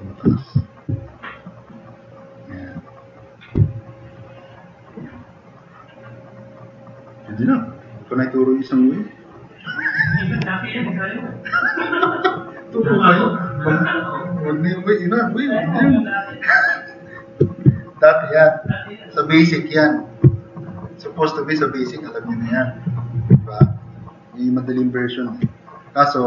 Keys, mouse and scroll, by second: 3.7-4.1 drag, 4.4 click, 5.4-5.7 drag, 6.2-7.3 drag, 7.7-8.3 middle drag, 7.7-8.1 scroll up 2, 8.1 scroll down 2, 8.5-8.9 drag, 9.1 click, 9.4 click, 10.8-12.3 drag, 14.2-15.3 drag, 16.3 scroll down 2, 17.7 click, 18.1 click, 20.4-20.7 drag, 21.8 drag, 23.7 click, 24.0 click, 24.1 middle click.